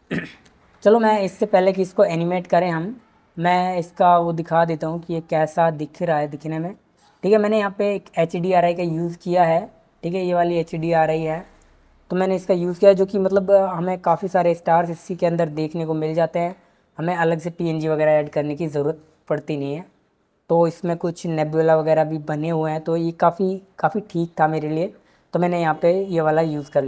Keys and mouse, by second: 8.6 click, 13.9 z.